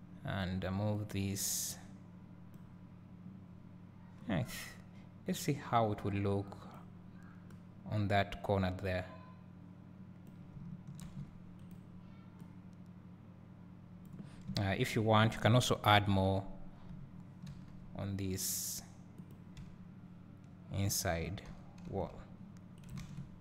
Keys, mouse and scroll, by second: 0.0 click, 1.1-11.8 drag, 4.4 scroll up 1, 11.2 shift+d, 11.8 right click, 12.6-19.3 drag, 14.5 `, 15.9 KP_7, 17.6 shift+d, 19.8 `, 21.6 e, 22.9 right click, 23.2 ctrl+z.